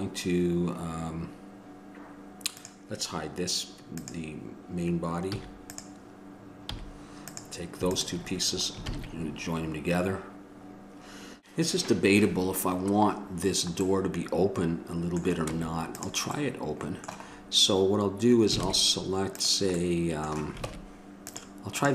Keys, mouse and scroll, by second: 5.5-11.4 drag, 5.5 a, 6.9 h, 9.1 ctrl+j, 15.6 Tab, 15.6 middle click, 16.9-19.7 middle drag, 18.9 ctrl+Tab.